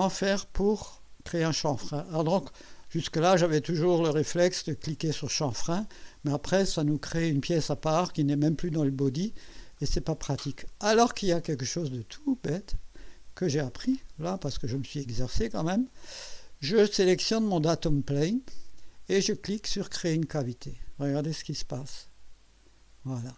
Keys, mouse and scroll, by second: 1.8-2.5 drag, 3.1-3.9 drag, 9.8-10.8 drag, 14.5 click, 20.1 click, 22.7 scroll up 1.